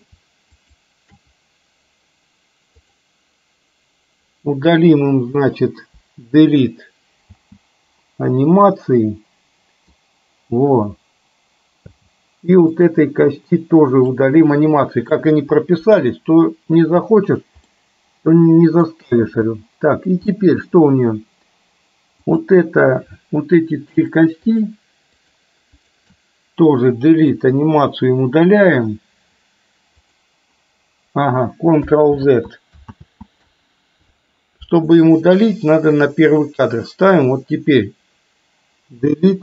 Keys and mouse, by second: 0.7 shift+click, 3.0 click, 6.0 Delete, 7.4 space, 8.5-10.0 middle drag, 12.0 space, 13.0 click, 14.1-15.2 drag, 15.9 Delete, 17.1 space, 17.7-19.0 middle drag, 19.2 space, 20.4 middle click, 24.5-24.9 shift+drag, 26.0 shift+click, 27.4 Delete, 30.1 click, 32.2 ctrl+z, 33.0 ctrl+z, 36.0 click, 39.1 Delete.